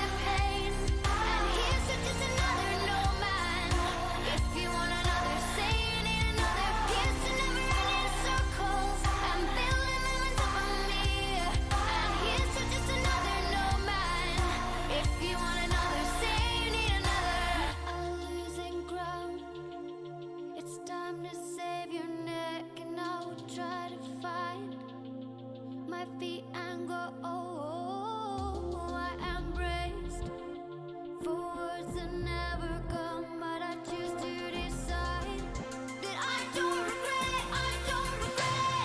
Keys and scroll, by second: 0.0-2.0 typing, 3.3 Return, 7.5-11.4 typing, 12.1 Up, 12.3 Return, 21.2-23.7 typing, 23.9 Down, 24.8 Return.